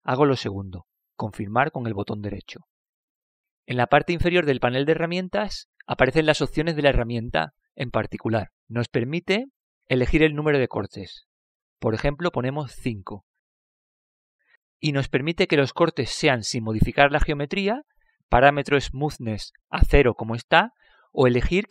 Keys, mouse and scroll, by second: 13.1-16.0 drag.